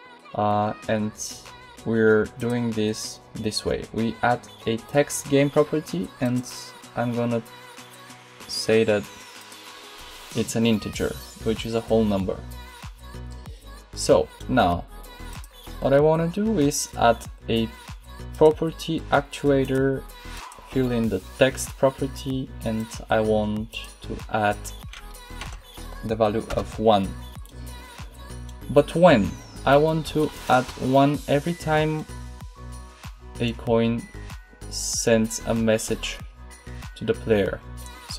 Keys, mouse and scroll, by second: 2.3-4.5 drag, 6.1-7.9 drag, 15.2-18.3 drag, 19.5-22.7 drag.